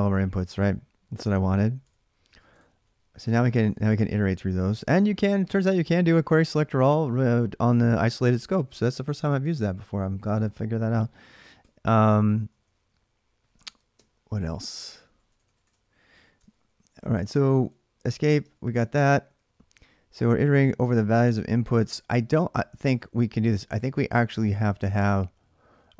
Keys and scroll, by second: 14.8-20.9 typing, 22.4 h, 22.6 h.